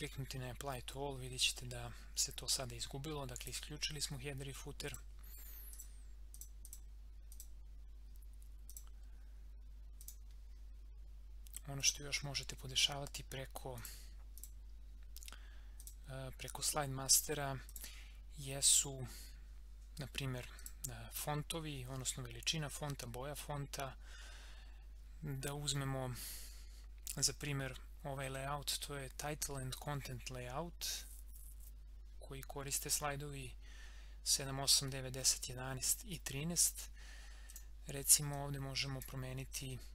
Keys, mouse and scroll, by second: 2.6 scroll up 1, 3.4 click, 12.8 scroll up 1, 13.8 click, 20.6 click, 37.5-39.9 drag.